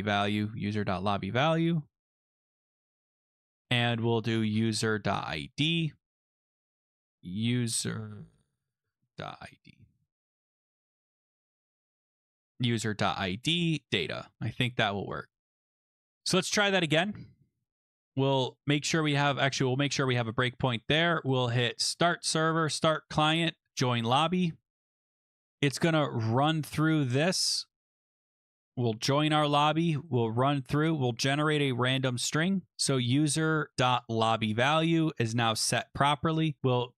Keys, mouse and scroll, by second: 0.0 ctrl+v, 0.0 scroll, 3.4 click, 3.5 click, 4.1-5.6 typing, 6.7 click, 6.8 click, 6.8-9.9 typing, 11.5 click, 11.5 click, 11.7-12.8 typing, 14.4 ctrl+s, 15.3 click, 16.6 click, 17.7 click, 18.6 click, 19.9 click, 20.4 click, 21.4 click, 22.0 click, 22.7 click, 23.7 click, 25.9 click, 26.4 click, 26.9 click, 28.1 click, 28.2 click, 28.9 click, 29.6 click, 30.0 click, 30.5 click, 32.7-33.7 scroll, 33.7 click, 34.1 click, 34.5 scroll, 35.8 click.